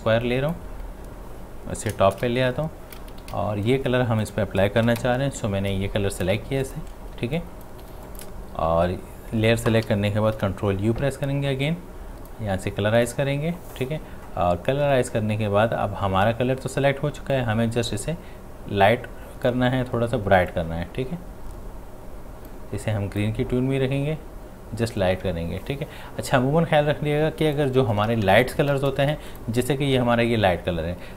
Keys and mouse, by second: 2.0 ctrl+shift+], 3.2 x, 4.2 click, 6.3 ctrl+space, 6.6 ctrl+click, 6.8 ctrl+space, 7.4 click, 7.7 space, 8.1 click, 10.4 ctrl+u, 11.7-13.0 drag, 17.3-29.1 drag, 29.1 space, 29.3 ctrl+alt+click.